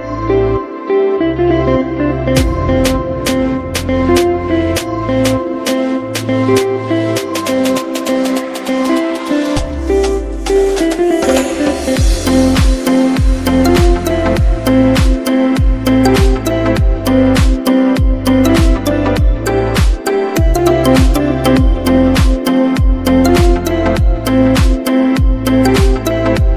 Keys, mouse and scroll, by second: 0.8 click, 5.4 click, 8.4 click, 12.7 click, 19.8 click.